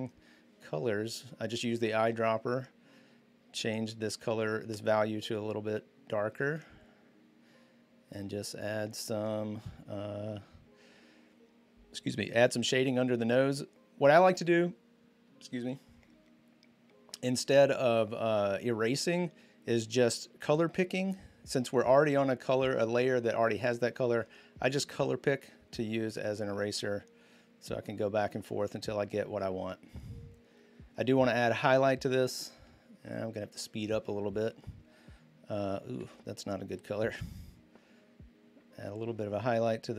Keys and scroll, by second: 0.6 typing, 1.8-2.5 typing, 35.8 ctrl+z.